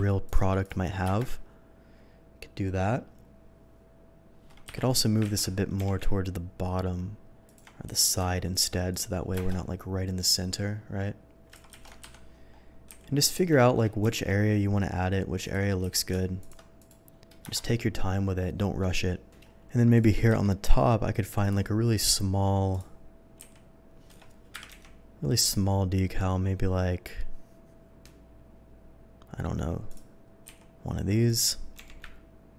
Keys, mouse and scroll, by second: 0.3 alt+click, 0.6 click, 1.2 KP_0, 4.7 7, 5.4 z, 5.8 g, 7.5 click, 7.8 v, 8.5 click, 8.9 click, 9.5 KP_0, 11.7 ctrl+z, 12.1 7, 12.9 s, 13.3 click, 13.6 middle click, 14.1 g, 14.6 g, 15.5 click, 15.8 v, 16.4 click, 16.8 click, 17.4 KP_0, 19.9 click, 20.7 v, 21.4 click, 22.7 click, 24.3 Escape, 24.5 Delete, 24.7 v, 25.4 click, 29.9 click, 30.8-32.5 typing, 31.3 click.